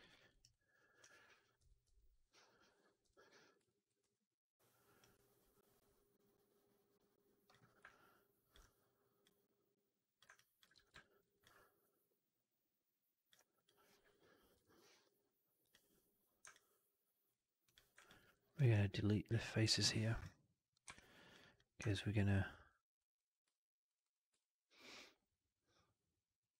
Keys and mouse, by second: 0.0 alt+middle click, 0.2 alt+right click, 0.4 alt+click, 1.5 Up, 1.7 Up, 3.5 click, 3.9 r, 4.9-7.4 drag, 7.7 alt+click, 9.1 click, 10.2 alt+click, 10.8 shift+x, 10.8 middle click, 11.1 right click, 11.3-13.1 drag, 13.5 click, 14.4 Delete, 16.4 alt+click, 17.5 click, 18.1 alt+middle click, 18.2 alt+right click, 18.4 alt+click, 19.1 Up, 19.5 Delete, 21.1 2, 21.2 click, 21.4 click, 21.7 alt+click, 22.9 alt+click, 23.8 shift+click, 23.9 shift+click, 24.3-26.4 alt+drag.